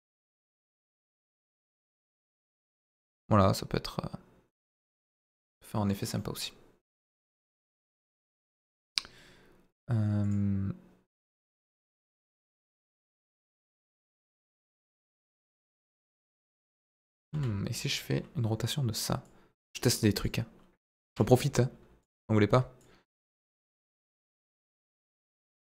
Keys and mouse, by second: 6.1-7.0 middle drag, 10.2 click, 16.3 click, 17.3 Delete, 17.7 click, 19.2-20.3 drag, 22.8-23.8 drag, 25.3 r, 25.5 z.